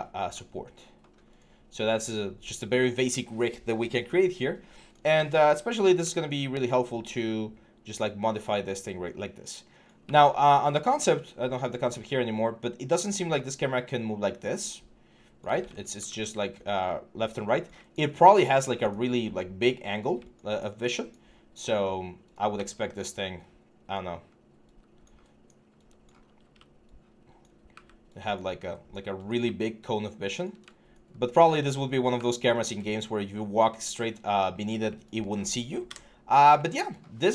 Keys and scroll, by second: 9.9 alt+Tab, 15.3 ctrl+z, 15.8 ctrl+z, 22.3 w, 26.2 i, 31.9 w, 35.6 Delete.